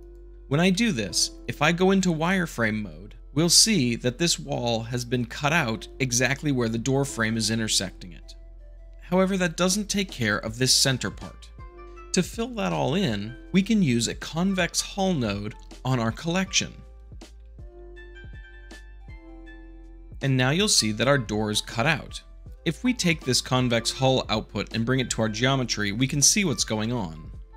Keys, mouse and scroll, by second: 2.2 z, 3.1-17.8 drag, 17.8 shift+middle click, 18.1 a, 18.3 click, 18.5 click, 18.6 shift+middle click, 18.7 scroll up 3, 19.1 middle click, 19.4 shift+middle click, 19.4 scroll up 2, 19.7-20.6 drag, 20.6-21.7 middle drag, 22.4-22.8 shift+middle drag, 24.6-25.6 drag, 26.7-27.5 middle drag.